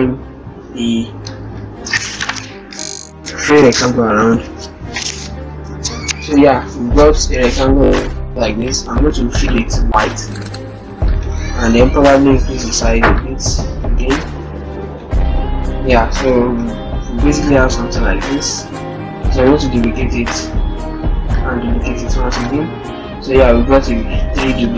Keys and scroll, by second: 12.0 ctrl+t, 15.8 ctrl+-, 16.1 ctrl+0, 18.1 ctrl+-.